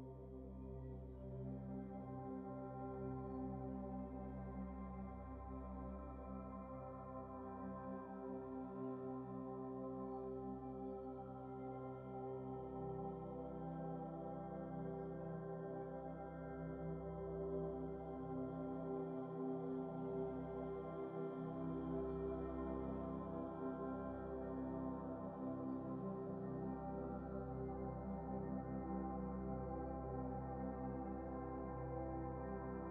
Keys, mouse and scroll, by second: 6.0 Tab, 8.1 ctrl+s, 8.9 scroll down 1, 10.7 scroll down 2, 11.0-12.1 middle drag, 12.1 scroll up 4, 16.2 click, 16.9 Tab, 17.4 scroll up 3, 17.7-19.4 middle drag, 22.3 a, 24.1-25.8 drag, 25.9 click, 26.4 shift+click, 27.0-28.7 drag, 29.0-31.0 drag, 32.3-32.9 middle drag.